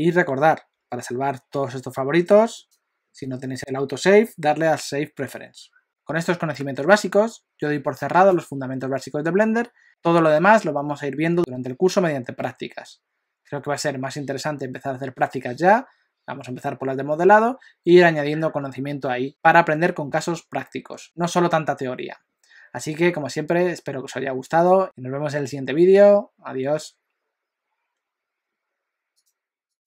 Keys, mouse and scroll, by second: 1.8 F4.